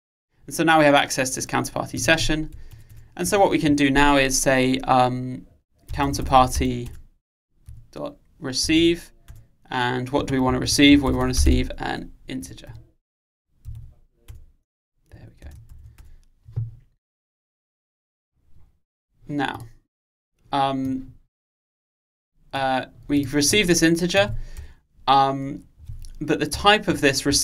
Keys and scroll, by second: 7.0 Return.